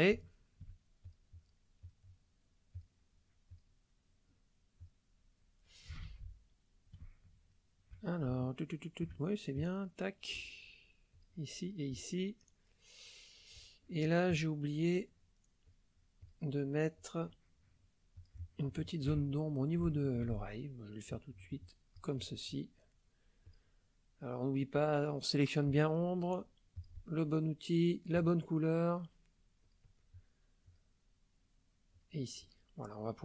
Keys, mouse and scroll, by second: 0.3 shift+click, 1.0 shift+click, 1.8 click, 2.7 click, 3.5 click, 4.8 click, 6.0 ctrl+z, 7.5 shift+click, 8.4 shift+click, 9.5 click, 11.1 click, 11.6 click, 14.3 click, 15.6 click, 16.2 click, 16.9 click, 18.2 click, 18.8 shift+middle click, 19.2-20.2 ctrl+shift+middle drag, 21.1-22.2 drag, 23.4 click, 24.5 click, 26.7 click, 27.9 click, 29.6 click, 30.7 click, 31.9 click.